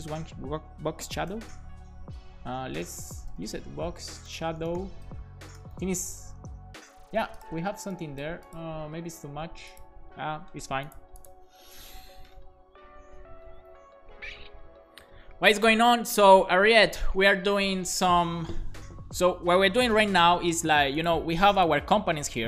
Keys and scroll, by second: 1.0-2.0 typing, 3.1-5.1 typing.